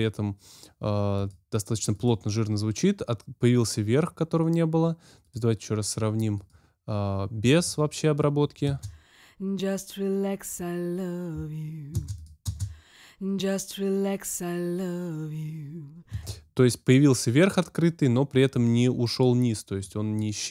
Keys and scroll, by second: 8.6 space, 11.9 space, 16.1 space.